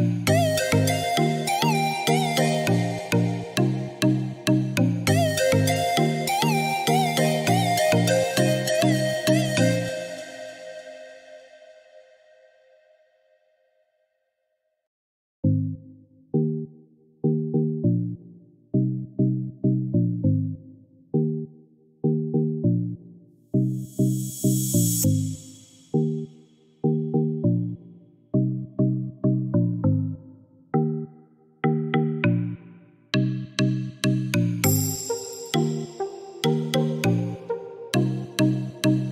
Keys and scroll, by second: 8.3 3, 8.6 1, 10.6 4, 11.0 2, 12.5 Return, 26.0 1, 26.4 0, 28.2 Return.